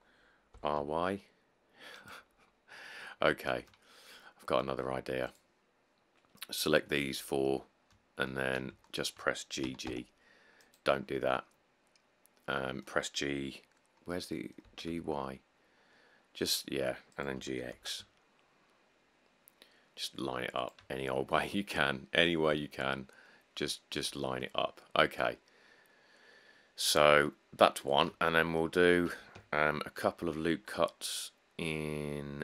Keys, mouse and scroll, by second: 0.8 r, 1.0 y, 3.5 shift+middle click, 7.6 middle click, 7.7 middle click, 7.8 middle click, 9.8 g, 10.0 g, 14.8 g, 15.3 y, 17.6 g, 18.0 x, 24.8 middle click, 24.9 middle click, 24.9 middle click, 27.5 middle click, 27.6 middle click, 27.7 middle click, 30.4 ctrl+r.